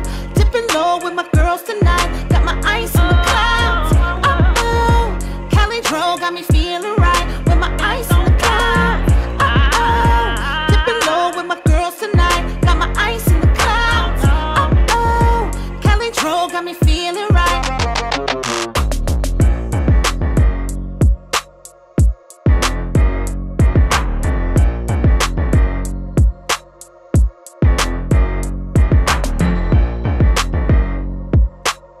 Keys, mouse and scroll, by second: 0.0-0.5 typing, 0.1 click, 1.7-2.4 typing, 1.9-2.4 scroll up 1, 3.4 click, 3.9-5.2 typing, 6.3-15.0 drag, 21.0 click, 21.9 5, 22.0 5, 22.3 Return, 23.8 click, 23.9-24.9 typing, 25.9-28.5 drag, 28.6 space, 31.3-32.0 click.